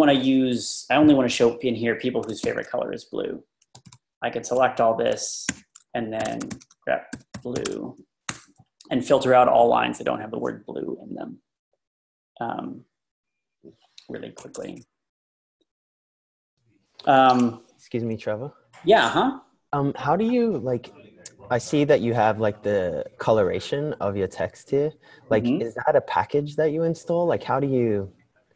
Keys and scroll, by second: 2.4 shift+v, 3.6 Down, 3.6 Down, 3.8 Down, 5.5-8.1 typing, 8.3 Return.